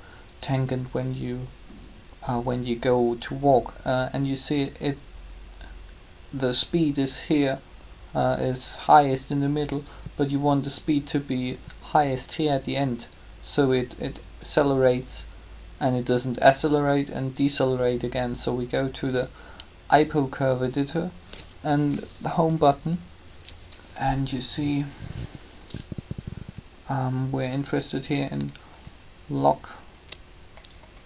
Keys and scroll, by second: 22.5 Home.